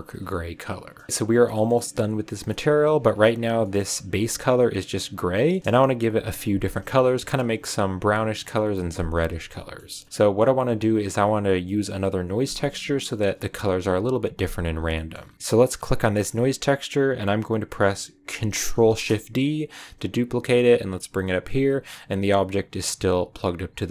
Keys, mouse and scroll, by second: 0.5 click, 0.9 scroll down 1, 1.5 middle click, 1.7-2.4 scroll down 4, 2.1 a, 2.4 middle click, 3.1-3.5 scroll up 2, 3.5-5.1 middle drag, 5.1 scroll down 2, 5.3-6.3 middle drag, 6.3-6.9 scroll down 2, 7.0-13.3 middle drag, 14.9-15.3 scroll up 2, 14.9-15.3 middle drag, 15.3 x, 15.4 click, 16.1 click, 18.7 ctrl+shift+d, 22.0 click, 23.7 middle click.